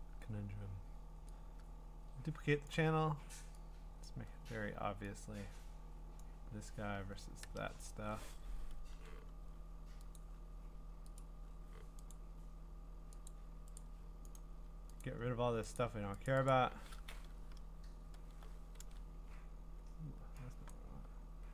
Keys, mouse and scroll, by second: 1.8 ctrl+i, 2.7 click, 4.0 click, 6.2 click, 7.4 Return, 8.9 i, 9.3 |, 10.2 click, 11.2 click, 12.1 click, 13.2 click, 13.8 click, 14.3 click, 15.0 click, 15.8 click, 16.2 click, 16.5 click, 18.8 ctrl+z, 20.7 click.